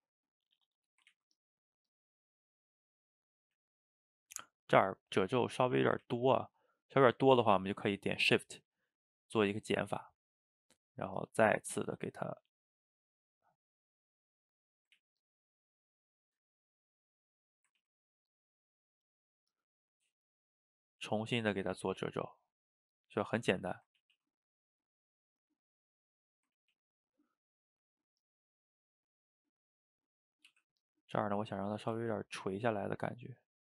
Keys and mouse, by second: 1.2 ctrl+z, 1.4-2.5 drag, 2.5 middle click, 3.4 ctrl+z, 3.6 ctrl+z, 3.7-5.3 middle drag, 5.3 click, 6.1 ctrl+z, 6.5 shift+click, 7.2 middle click, 7.6 ctrl+z, 8.1 shift+click, 8.9 middle click, 9.3-10.3 shift+drag, 10.3 middle click, 10.7-12.3 drag, 12.3-13.9 middle drag, 13.9-15.0 drag, 15.0 ctrl+z, 15.3-16.6 drag, 16.6-17.9 middle drag, 17.9 ctrl+z, 18.2-21.9 drag, 21.9-23.1 middle drag, 23.1 click, 24.0 ctrl+z, 24.2 ctrl+z, 24.4 middle click, 24.9-26.6 drag, 26.6 ctrl+z, 26.8 ctrl+z, 27.1-30.5 drag, 30.5 f, 31.2 click, 32.0 ctrl+z, 32.2-33.3 drag, 33.3-33.6 middle drag.